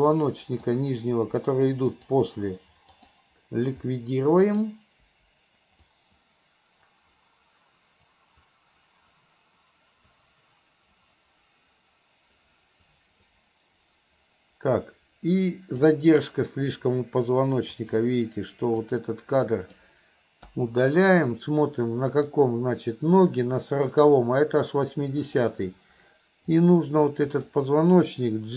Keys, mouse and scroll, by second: 0.2 Delete, 0.7-1.1 drag, 2.0 click, 3.0 click, 3.2 click, 4.5 click, 5.2 Delete, 6.0-16.0 drag, 17.7 click, 18.9-19.8 drag, 20.6 Delete, 22.1 click, 25.3 click, 26.5-27.5 drag.